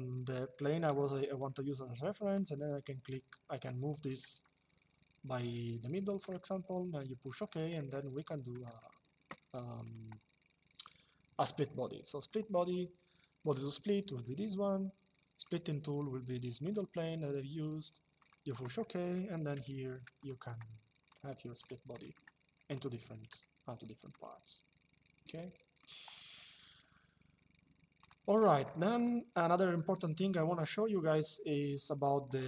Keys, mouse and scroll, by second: 2.0 click, 4.1 shift+middle click, 7.0 click, 7.5 middle click, 7.8 shift+middle click, 11.9 click, 13.9 click, 15.1 click, 16.4 click, 17.9 click, 19.2 m, 19.9 click, 23.1 shift+middle click, 25.5 click, 27.7 click, 31.5 click.